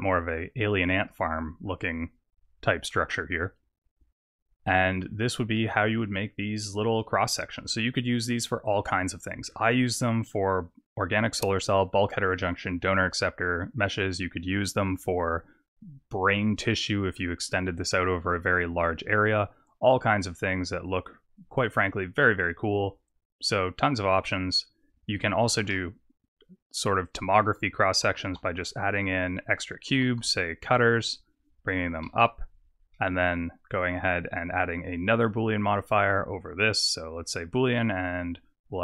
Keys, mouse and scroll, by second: 0.7 scroll up 3, 1.1 middle click, 1.7-2.6 scroll down 4, 2.9 middle click, 5.5 middle click, 16.7 middle click, 19.8 click, 20.8 click, 21.6 click, 23.8 middle click, 25.6 shift+a, 28.0 s, 29.9 s, 31.8 g, 32.9 middle click, 34.2 click, 35.6 click, 36.4 click.